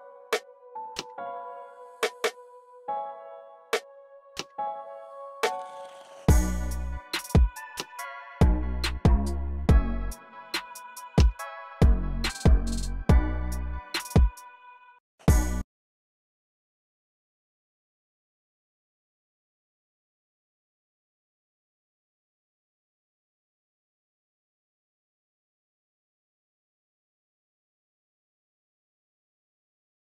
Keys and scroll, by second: 3.7 e, 7.4 BackSpace, 11.0-15.4 typing, 11.7 super+a, 12.1 Return, 21.1 x, 22.1 y.